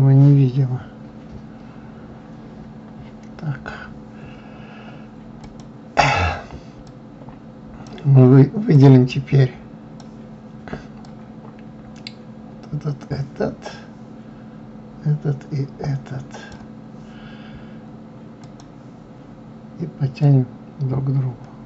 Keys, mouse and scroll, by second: 0.6-1.3 scroll up 3, 1.8-3.1 scroll up 1, 3.1-3.5 scroll down 1, 5.8 click, 7.3 click, 9.1-14.5 drag, 18.8 click, 20.6-21.6 drag.